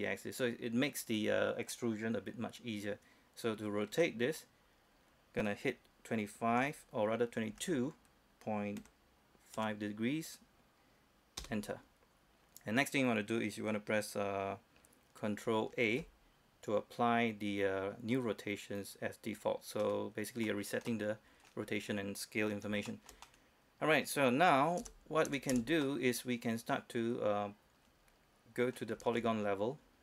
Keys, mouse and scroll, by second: 4.1 r, 6.7 2, 9.0 ., 9.8 5, 11.6 Return, 16.1 ctrl+a, 19.0 click, 20.0 middle click, 20.8-21.1 scroll down 1, 21.1 middle click, 21.9-22.6 scroll up 1, 22.6-22.9 scroll down 1, 23.1-24.8 shift+middle drag, 25.0 Tab, 26.1-29.2 middle drag.